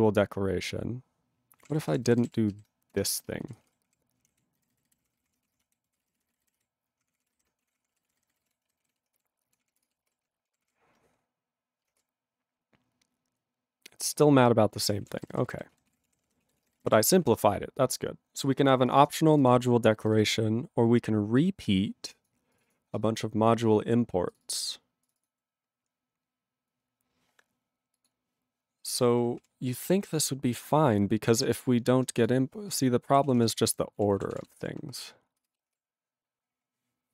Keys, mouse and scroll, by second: 1.5 ctrl+p, 1.6 ctrl+a, 1.8 ctrl+k, 2.0 ctrl+n, 2.2 ctrl+e, 2.5 ctrl+b, 3.0 BackSpace, 3.5 ctrl+e, 3.5 ctrl+space, 3.6 ctrl+a, 3.7 ctrl+p, 4.3 Tab, 4.6 ctrl+n, 5.1 ctrl+k, 5.2 ctrl+p, 5.2 ctrl+e, 5.4 ctrl+space, 5.4 ctrl+a, 5.6 Tab, 5.9 ctrl+p, 5.9 ctrl+space, 6.0 ctrl+e, 6.0 ctrl+n, 6.5 Tab, 7.0 ctrl+p, 7.2 ctrl+e, 7.3 ,, 7.7 ctrl+a, 7.8 ctrl+p, 7.9 ctrl+space, 7.9 ctrl+n, 8.4 ctrl+e, 8.4 ctrl+g, 8.8 ctrl+s, 10.2 ctrl+s, 10.5 ctrl+p, 10.6 ctrl+e, 14.3 ctrl+p, 15.0 ctrl+a, 15.1 ctrl+space, 15.2 ctrl+e, 15.3 ctrl+n, 15.4 ctrl+e, 15.5 ctrl+g, 15.9 ctrl+s, 16.0 ctrl+p, 16.1 ctrl+e, 16.1 ctrl+p, 16.3 ctrl+e, 16.4 ctrl+a, 16.5 ctrl+space, 16.6 ctrl+e, 16.6 ctrl+n, 16.8 ctrl+g, 17.2 ctrl+s, 18.2-18.9 scroll down 1, 18.9 click, 18.9 click, 19.0 double click, 19.0 double click, 19.3 click, 19.3 click, 19.4 double click, 19.5 double click, 20.1 click, 20.1 click, 20.2 double click, 20.2 double click, 21.4 click, 22.2 click, 22.5 click, 22.6 click, 22.6 double click, 22.7 double click, 24.3 click, 24.3 click, 24.4 double click, 24.5 double click, 25.0 click, 25.1 click, 25.2 double click, 25.2 double click, 26.2-27.1 scroll down 1, 27.1-28.0 scroll down 1, 28.0 click, 28.1 click, 29.4 ctrl+a, 29.7 ctrl+space, 29.8 ctrl+n, 32.0 BackSpace, 32.2 click, 32.3 click, 32.7 click, 32.7 click, 33.3 ctrl+s, 33.4 ctrl+p, 34.0 ctrl+e, 34.3 ctrl+s, 35.9 ctrl+s, 36.6-37.1 scroll up 1.